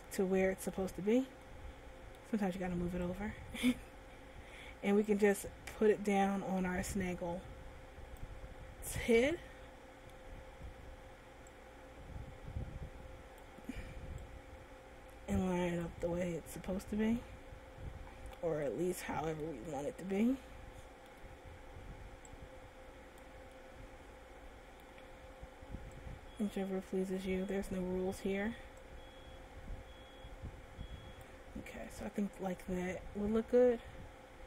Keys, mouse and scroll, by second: 0.2 middle click, 1.6 shift+middle click, 3.3 click, 6.4 click, 8.8-9.4 scroll up 3, 9.4 middle click, 10.5-10.8 scroll up 2, 11.8 click, 14.4 click, 16.4 middle click, 17.9-18.3 scroll up 3, 18.3 scroll down 2, 18.8 middle click, 20.1 shift+middle click, 22.5 click, 23.8 middle click, 26.2 click, 29.0 click, 32.0 middle click, 33.8 scroll down 1.